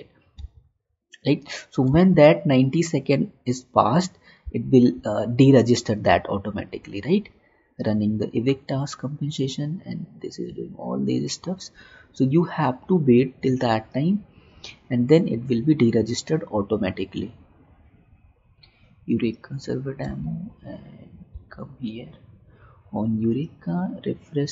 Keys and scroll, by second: 0.8 alt+Tab, 2.1 alt+Tab, 4.6 alt+Tab, 20.4 alt+Tab.